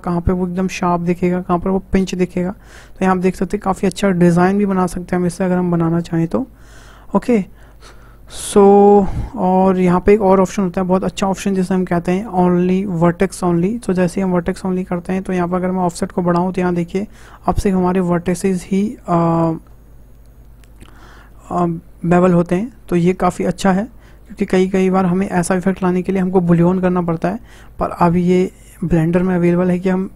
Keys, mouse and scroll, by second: 13.5 click, 15.5-18.6 drag, 20.7 click, 21.3-24.3 middle drag, 28.2 click, 30.0-30.1 drag.